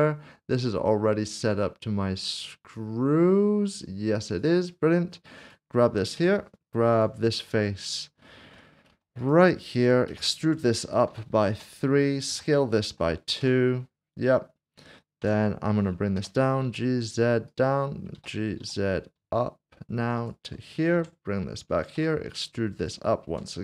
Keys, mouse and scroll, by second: 4.3 click, 6.2 Tab, 6.9 click, 7.7 scroll up 1, 8.9 typing, 9.2 click, 10.1-12.9 typing, 13.4 Return, 15.2 Tab, 16.6 typing, 17.5 click, 18.6 z, 20.2 ctrl+click, 22.8 e, 23.3 Tab.